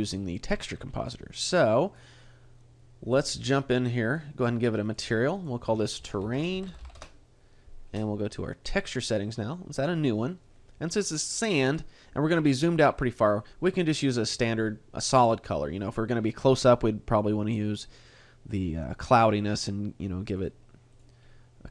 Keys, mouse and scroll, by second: 0.1 shift+middle click, 0.9 a, 1.4-2.0 scroll up 2, 2.0 right click, 4.1 click, 4.9 click, 6.9 click, 8.7 click, 9.7 click, 11.9 click, 13.7 click, 20.3 click, 20.9 click, 21.3-21.7 scroll down 1.